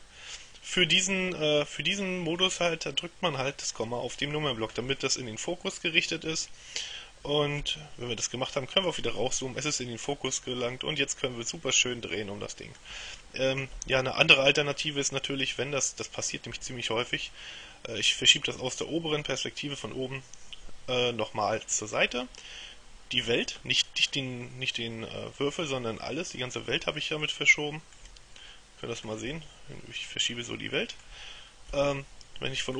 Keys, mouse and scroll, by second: 7.7 KP_Decimal, 8.9-9.8 scroll down 2, 10.3-13.3 middle drag, 13.8 KP_7, 14.7-15.4 scroll down 2, 15.6-17.6 shift+middle drag, 24.1-24.7 scroll down 2, 27.1-28.5 shift+middle drag, 28.6-29.7 shift+middle drag, 31.7 KP_7.